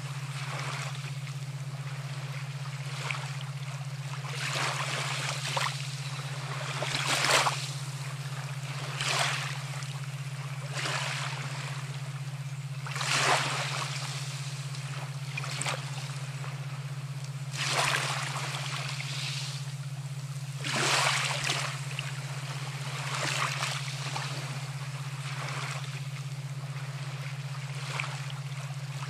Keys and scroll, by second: 11.4 ctrl+0.